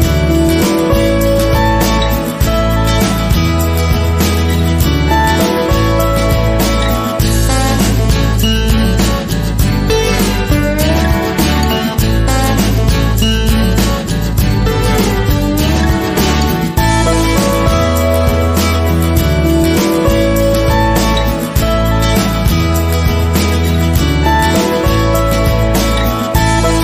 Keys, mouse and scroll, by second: 1.0 click, 2.1 scroll up 1, 3.1-4.4 shift+middle drag, 4.4 click, 5.8 click, 15.8-16.1 scroll down 1, 16.4-17.8 scroll up 2, 17.8-20.9 scroll up 1, 20.9 click.